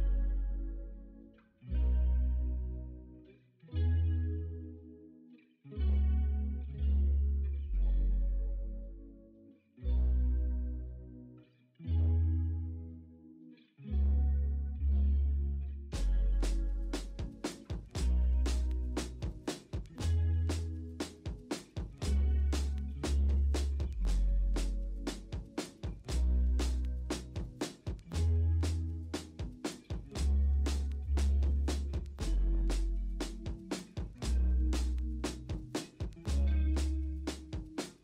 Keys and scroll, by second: 1.0 s, 2.4 ctrl+z, 3.7 ctrl+z, 6.9 ctrl+d, 8.2 m, 11.5 alt+BackSpace, 11.8 b, 12.2 alt+BackSpace, 12.4 ctrl+d, 12.5 v, 12.9 ctrl+alt+g, 15.8 Return, 15.9-17.8 typing, 19.5 Up, 19.5 ctrl+t, 20.6 Return, 21.1 typing, 22.5 ctrl+z, 22.7 3, 23.4 alt+Tab, 25.3 typing, 26.3-28.1 typing, 29.2 1, 31.7-34.7 typing, 32.1 ctrl+z, 34.6 ctrl+z.